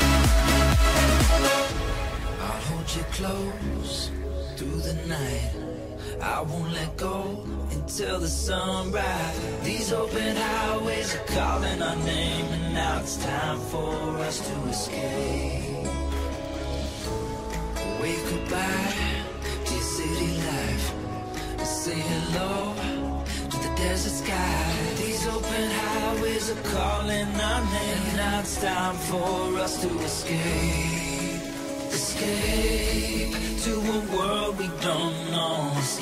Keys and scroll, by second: 19.4 k, 26.6 [.